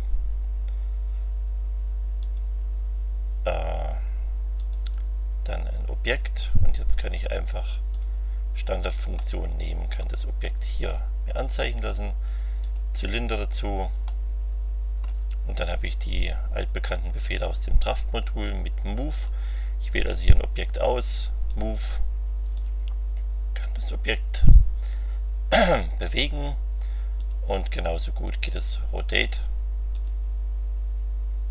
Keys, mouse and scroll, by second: 2.2 click, 4.5 click, 7.9 click, 9.1 middle click, 10.0-10.8 scroll down 3, 12.6 click, 14.0-15.2 drag, 20.0 click, 21.4 click, 22.5 click, 24.3 click, 27.1 click, 28.5 click, 29.1 click, 29.9 click.